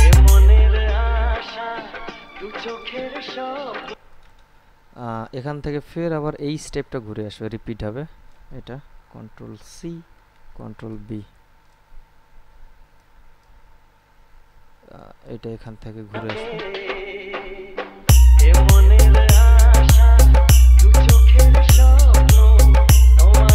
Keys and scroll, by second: 4.1 space, 9.5 ctrl+c, 10.6 ctrl+b, 16.3 space, 18.6 ctrl+b.